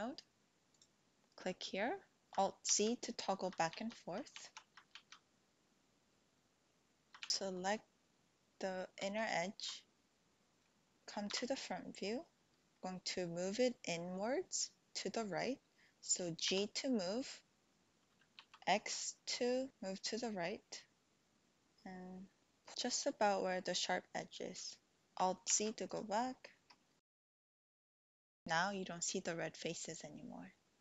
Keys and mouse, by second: 0.7 click, 2.2 alt+z, 3.6 alt+z, 4.5 alt+z, 4.9 alt+z, 7.3 click, 9.2 alt+shift+click, 11.2 KP_1, 16.5 g, 18.4 x, 24.9 Tab, 25.4 alt+z, 25.9 click, 27.4 click.